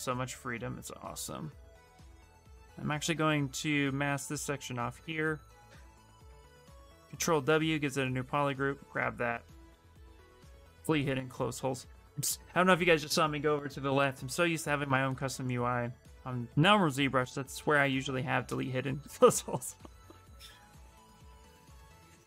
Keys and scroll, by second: 6.6 ctrl+w, 7.1 shift+f.